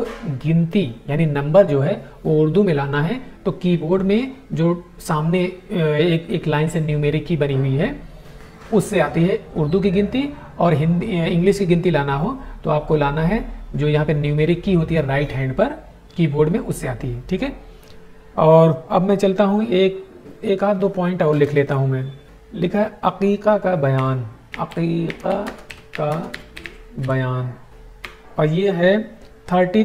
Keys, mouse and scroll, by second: 23.9-27.9 typing, 27.9 Tab.